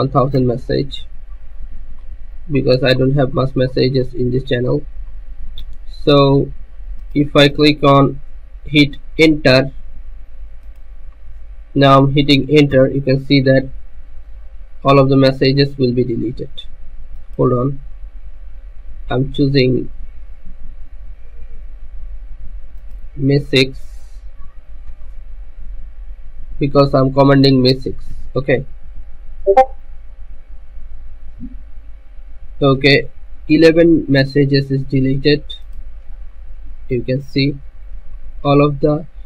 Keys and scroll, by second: 0.0-0.1 typing, 12.9 Return, 28.3 Return.